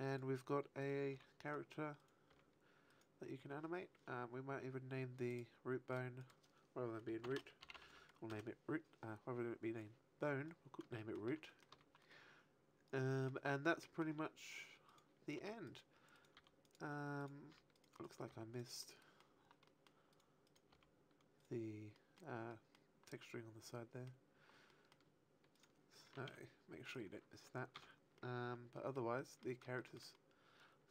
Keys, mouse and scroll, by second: 0.1 right click, 0.3 right click, 0.7 right click, 1.0 r, 1.4 right click, 1.9 right click, 2.2 r, 2.9 right click, 5.2 click, 5.8 click, 6.1 click, 10.9 shift+middle click, 11.4 middle click, 11.6 a, 11.9 middle click, 13.7 middle click, 14.8 right click, 15.3 r, 15.5 right click, 16.0 r, 16.4 click, 17.0 right click, 17.3 r, 17.6 right click, 17.8 right click, 18.2 r, 18.6 click, 18.7 middle click, 19.6 middle click, 20.1 right click, 20.4 right click, 20.6 r, 21.4 right click, 21.9 middle click, 22.4 middle click, 23.3 middle click, 25.5 middle click, 25.5 right click, 26.2 alt+r, 26.8 right click, 28.1 alt+r, 28.1 middle click, 29.1 middle click, 29.7 shift+middle click, 30.0 middle click.